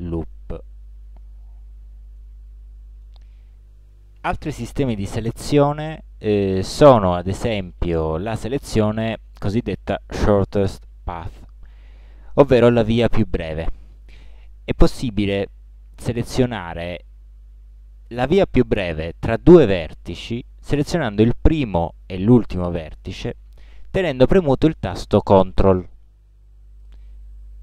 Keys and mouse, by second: 4.3 a.